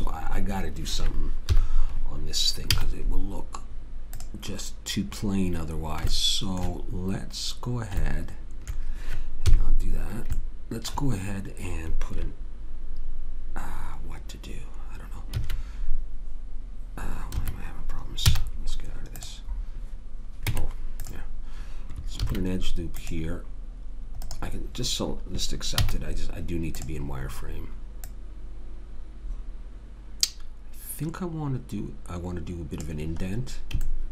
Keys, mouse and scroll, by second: 1.5 KP_3, 2.7 z, 9.5 KP_3, 15.4 ctrl+r, 17.3 Escape, 18.3 z, 20.5 Tab, 22.2 ctrl+r, 25.8 z, 28.1 click, 33.2-34.1 middle drag.